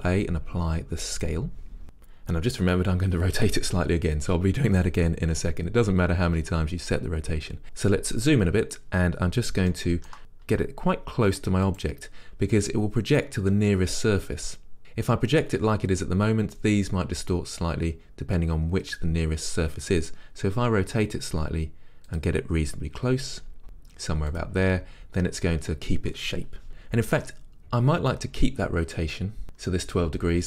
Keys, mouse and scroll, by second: 1.3 ctrl+a, 8.3 scroll up 1, 9.8 shift+middle click, 10.5-11.9 middle drag, 10.6 g, 11.9 click, 20.6 click, 20.7 r, 22.3 click, 23.2 g, 24.3 middle click, 24.5 click.